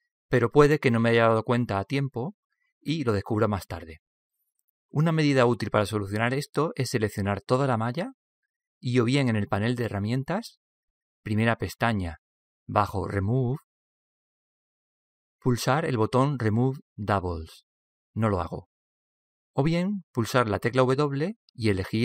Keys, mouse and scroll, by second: 8.0 a, 8.5 a.